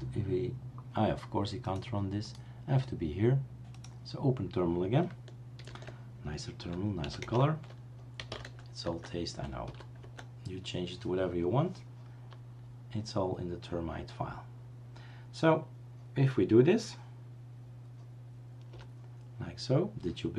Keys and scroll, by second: 5.6 super+3, 7.2-10.1 typing, 18.7 Return.